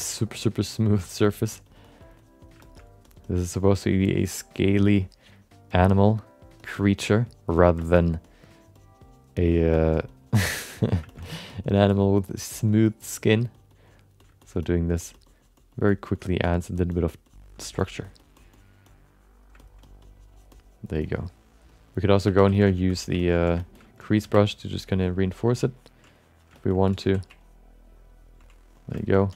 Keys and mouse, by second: 1.1 click, 1.2 middle click, 1.5 click, 1.9 click, 2.6 shift+middle click, 2.7 middle click, 3.1 click, 3.3 click, 7.0 click, 7.8 alt+shift+middle click, 7.9 middle click, 8.2 click, 9.8 click, 10.0 click, 11.1 shift+middle click, 11.2 middle click, 11.5 click, 12.0 click, 12.5 click, 13.6 click, 14.2 click, 14.4 alt+shift+middle click, 14.6 middle click, 15.0 click, 16.1 click, 16.6 click, 17.1 click, 17.6 shift+middle click, 17.8 alt+middle click, 18.0 click, 18.5 click, 19.6 alt+middle click, 19.8 click, 22.3 2, 22.5 f, 22.7 alt+shift+middle click, 22.9 alt+middle click, 23.2 ctrl+alt+middle click, 23.6 alt+shift+middle click, 23.7 middle click, 24.1 f, 24.5 ctrl+click, 24.8 ctrl+click, 25.7 ctrl+click, 26.1 click, 26.5 shift+middle click, 26.7 alt+middle click, 27.0 f, 27.4 ctrl+click, 28.4 click, 29.0 alt+shift+middle click, 29.1 middle click.